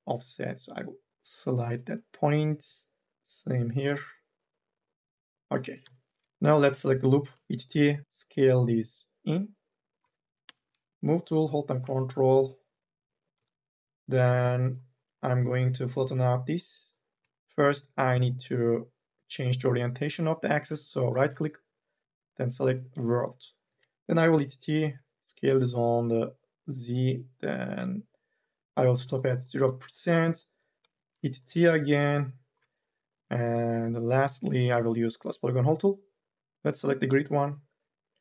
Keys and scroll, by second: 1.1 ctrl+z, 5.5 2, 7.1 t, 10.3 e, 21.3 ctrl+z, 24.2 t, 27.7 e, 30.6 t.